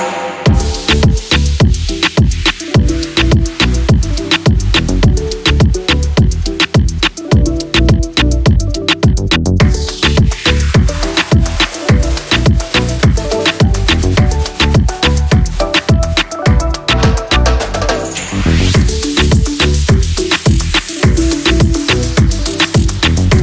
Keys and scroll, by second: 8.0 ctrl+s.